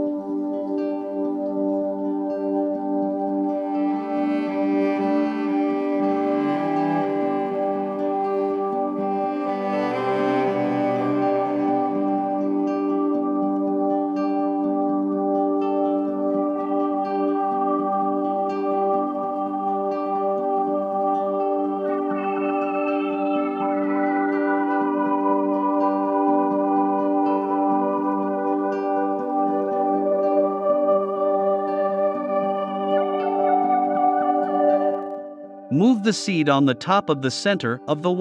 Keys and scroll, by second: 13.4 shift+c, 18.1 a, 22.3 Down, 23.8 Up, 26.3 Left, 28.3 Right, 29.0 v.